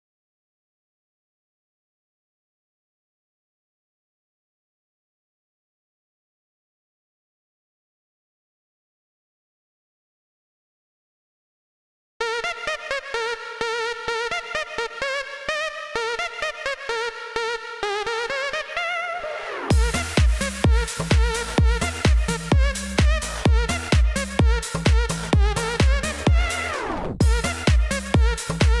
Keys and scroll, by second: 0.0 d, 1.0 a, 1.9 v, 2.4 d, 8.2 o, 9.0 z, 10.1 o, 10.6 z, 11.6 o, 12.1 x, 21.7 c, 25.1 c.